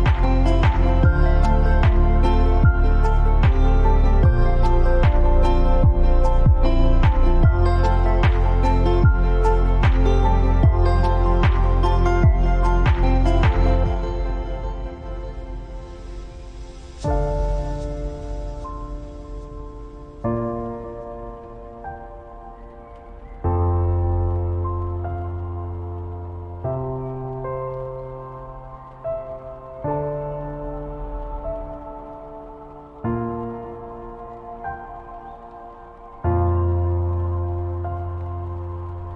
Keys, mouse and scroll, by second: 1.5 click, 3.3 alt+scroll up 1, 4.3-23.5 drag, 24.4 ctrl+t, 25.5 alt+shift+click, 25.6-31.0 alt+shift+drag, 36.8 click, 36.9 click.